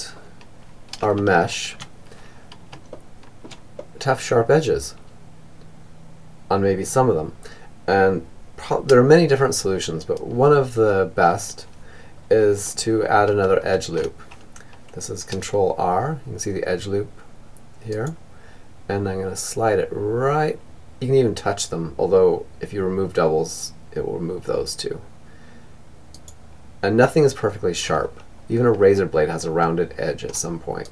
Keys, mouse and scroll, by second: 1.3-4.2 middle drag, 9.2-11.0 middle drag, 12.1 ctrl+r, 28.5 ctrl+r.